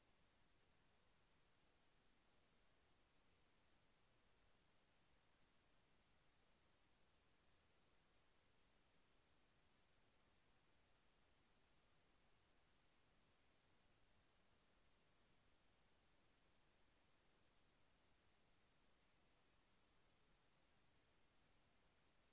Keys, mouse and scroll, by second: 0.3 click, 2.4 click, 4.3 click, 7.3 click, 10.2 click, 11.3 Right, 12.1 Left, 15.9 click, 18.9 shift+Tab, 20.4 shift+Right.